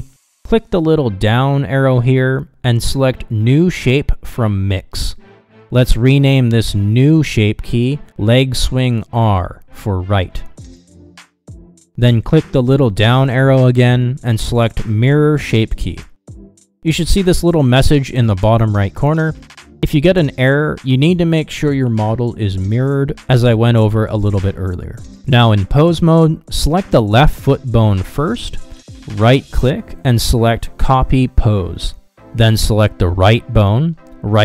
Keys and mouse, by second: 2.9-5.6 drag, 6.5-13.4 drag, 15.5-19.0 drag, 26.0 click, 30.4-33.0 right drag, 33.4 click.